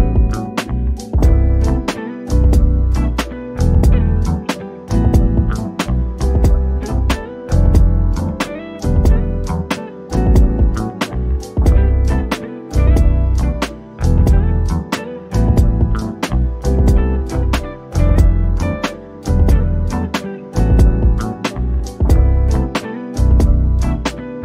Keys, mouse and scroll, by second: 0.5 Escape, 2.6 shift+click, 5.7 click, 7.6-9.0 middle drag, 9.0 shift+click, 11.9 Escape, 13.3 shift+click, 13.8 scroll up 1, 17.2 click, 21.3 o, 21.6 click, 22.3 scroll up 1, 23.0 Escape.